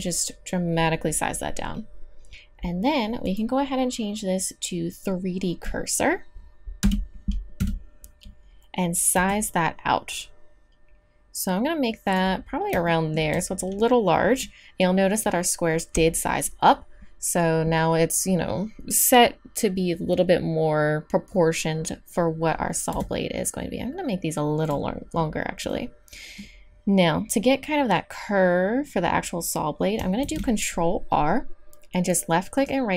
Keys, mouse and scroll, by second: 6.8 n, 7.6 KP_3, 9.1 s, 12.4 click, 16.6-22.9 middle drag, 22.9 s, 30.2 ctrl+r.